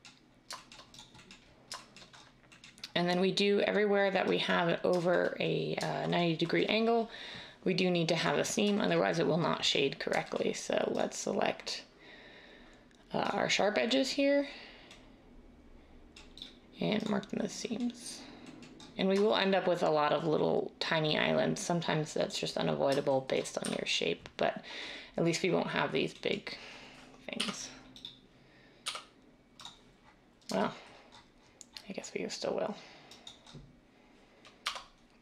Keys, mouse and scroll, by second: 23.6 a, 27.4 i, 28.9 u, 34.6 Tab.